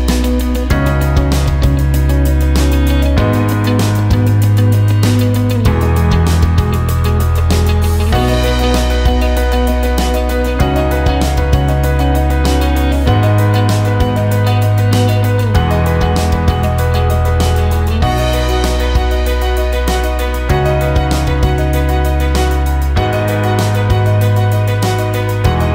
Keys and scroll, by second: 0.8 e, 20.6 ctrl+a.